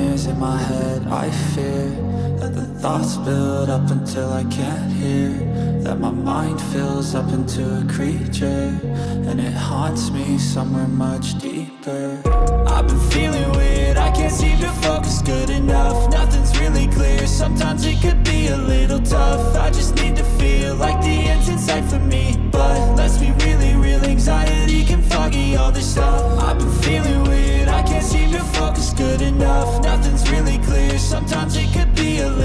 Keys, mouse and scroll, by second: 2.9 alt+space, 3.0 alt+click, 3.2 alt+double click, 3.4 alt+space, 3.9 ctrl+click, 5.6 double click, 15.6 alt+space, 15.7 alt+click, 15.9 alt+double click, 16.1 alt+space, 16.8 alt+click, 18.9 double click, 24.2 space.